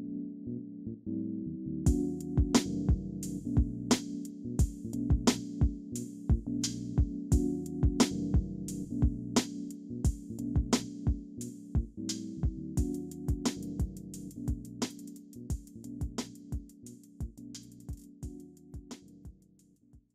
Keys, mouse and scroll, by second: 0.9 double click, 2.4 scroll down 1, 2.7 alt+middle click, 2.9 alt+scroll up 1, 3.1 alt+click, 6.1 alt+middle click, 6.6 alt+click, 7.7 alt+middle click, 8.2 alt+click, 8.8 alt+middle click, 9.3 alt+click, 9.9 alt+middle click, 10.4 alt+click, 10.9 alt+middle click, 11.8 alt+click, 12.8 alt+middle click, 13.2 alt+click, 14.1 alt+middle click, 14.4 alt+scroll up 1, 15.3 alt+click, 17.1-17.6 scroll down 2, 17.8 alt+middle click, 18.2 alt+click, 18.7 alt+middle click.